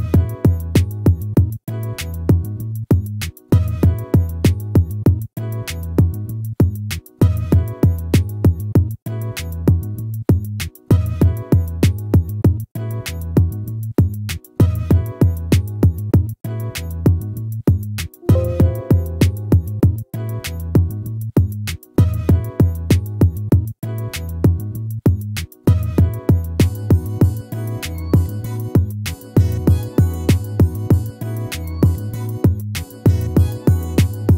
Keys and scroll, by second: 0.1 ctrl+-, 1.3 ctrl++, 13.1 ctrl++.